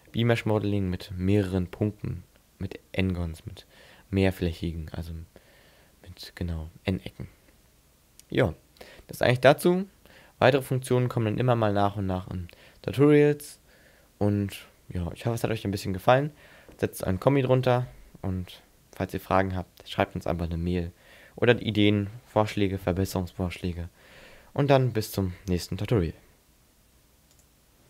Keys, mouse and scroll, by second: 4.4-6.3 scroll up 6, 6.3 scroll up 1, 14.3-16.2 scroll up 5.